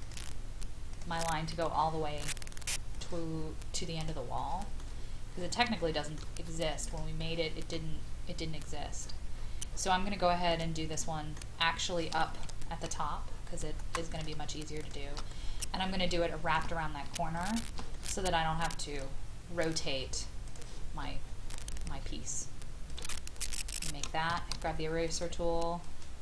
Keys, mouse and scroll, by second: 0.0 click, 1.5 Escape, 2.9 click, 4.3 middle click, 5.8 shift+middle click, 6.9 click, 7.2 middle click, 9.0-9.4 scroll up 1, 9.8-10.5 scroll up 1, 10.5 click, 10.9 middle click, 11.6-12.3 scroll down 1, 12.3 Escape, 12.9-13.8 scroll up 1, 14.1 click, 14.8 shift+click, 15.3 middle click, 15.7-16.5 scroll down 2, 17.4 shift+click, 18.0-19.3 middle drag, 20.4 click, 20.9 scroll up 1, 21.5-22.9 scroll down 1, 22.9 click, 23.5-24.3 scroll down 1, 24.3 scroll down 1, 25.1 shift+click, 25.8 shift+click.